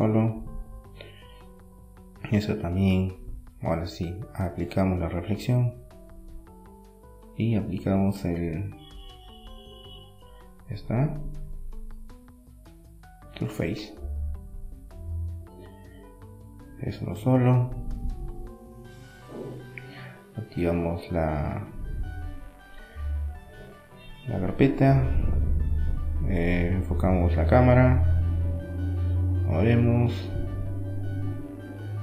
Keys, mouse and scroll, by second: 2.1 Tab, 3.0-4.7 middle drag, 4.8-7.3 middle drag, 5.1 Tab, 7.3-9.1 drag, 8.3 Tab, 8.7-10.4 middle drag, 10.4 Tab, 10.5-13.0 middle drag, 13.0 click, 14.8 middle click, 15.9 click, 18.4 KP_0, 19.4 middle click, 20.0-21.3 drag, 21.3 right click, 21.3 g, 23.8 g, 28.3-30.0 drag, 30.0 middle click, 30.5-32.0 drag.